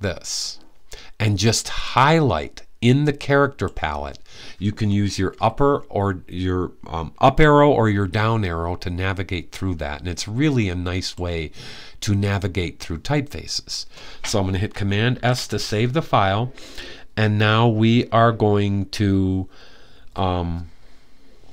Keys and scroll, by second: 5.1 Down, 7.8 Up, 14.9 super+s.